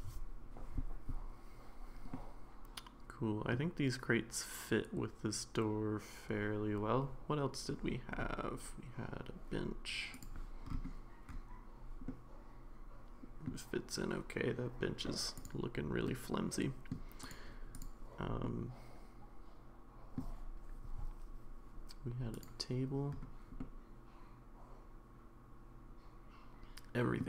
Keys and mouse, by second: 2.1-3.5 middle drag, 10.1 click, 12.1-13.5 middle drag, 16.1-16.9 middle drag, 17.7 click, 18.5-20.2 middle drag, 22.3 click, 23.6-27.2 middle drag.